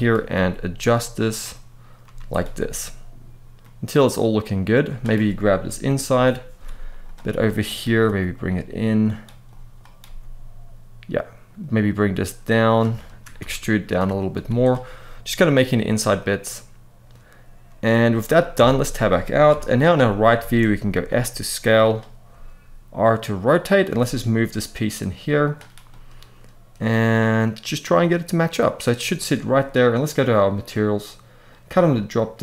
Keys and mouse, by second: 0.1 g, 1.0 click, 1.8 z, 3.3 middle click, 5.9 KP_1, 6.3 z, 7.2 shift+middle click, 7.8 g, 8.8 click, 9.4 click, 9.8 g, 12.7 shift+middle click, 13.2 e, 13.9 click, 14.1 z, 15.1-17.7 middle drag, 18.3 Tab, 19.2 KP_3, 20.2 shift+middle drag, 20.7 s, 22.0 r, 23.4 click, 23.6 g, 25.2 click, 25.6-28.6 middle drag, 30.2 click, 31.3-32.4 drag.